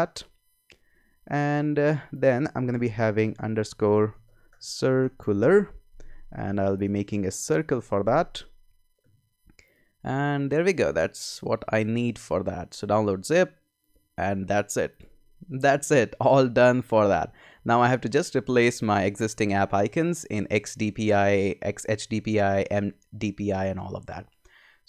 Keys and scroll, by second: 3.2-6.0 typing.